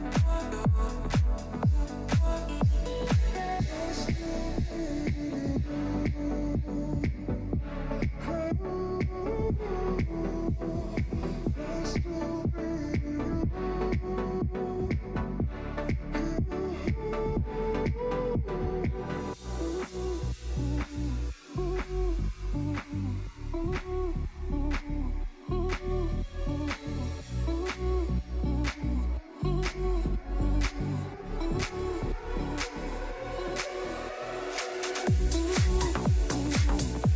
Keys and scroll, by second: 0.0 shift+F2, 0.4 F3.